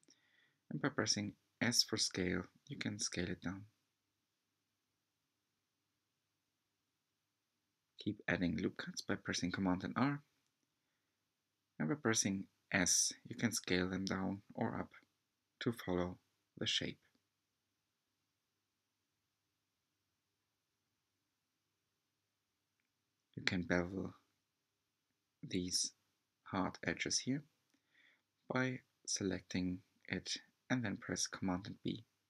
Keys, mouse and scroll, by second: 0.0-1.3 scroll up 2, 1.4 s, 8.8-9.6 scroll up 1, 9.6-10.4 scroll up 1, 10.4-10.7 scroll up 1, 21.1-21.7 scroll up 4, 21.7-24.7 shift+middle drag, 25.6 alt+click, 27.8 b.